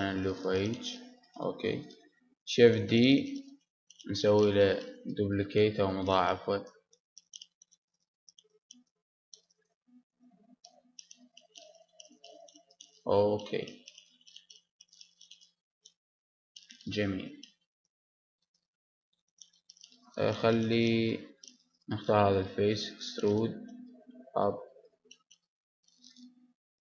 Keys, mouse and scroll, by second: 0.9-2.9 drag, 1.2 g, 2.6 shift+d, 3.6 click, 4.7-5.9 drag, 6.4 r, 8.1-10.0 drag, 10.0-12.0 middle drag, 13.1-14.9 drag, 15.7-21.7 middle drag, 21.7 click, 22.7 e, 24.2-26.8 drag, 26.4 s.